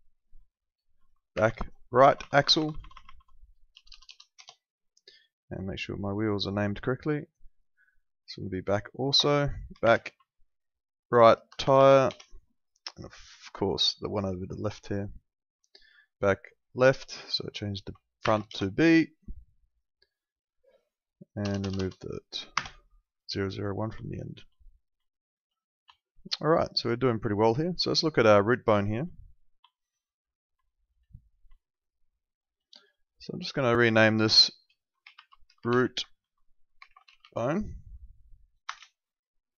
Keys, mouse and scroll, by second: 1.3 shift+b, 1.9 Right, 3.7 BackSpace, 4.3 Return, 6.2 click, 9.8 shift+b, 10.1 Right, 11.5 BackSpace, 12.0 Return, 14.1 click, 16.8 click, 18.2 shift+b, 18.4 Return, 19.6 click, 21.4 BackSpace, 22.5 KP_Enter, 24.6 middle click, 25.0 alt+middle click, 25.9 alt+middle click, 26.9 alt+middle click, 27.8 alt+middle click, 28.3 click, 28.8 alt+middle click, 30.3 alt+middle click, 30.6 alt+middle click, 31.6 alt+middle click, 33.3 click, 34.9-37.6 typing, 38.6 Return, 38.6 KP_Enter.